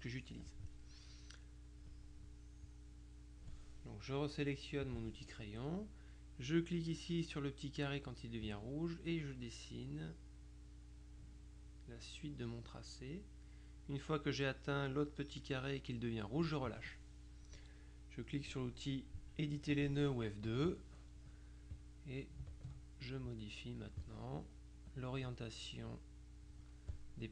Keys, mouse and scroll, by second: 1.6 click, 2.7 click, 5.0 click, 8.2-17.0 drag, 19.8 click, 20.6 F2, 21.8 click, 22.6 ctrl+click, 23.4 click, 25.0 click, 26.0 click.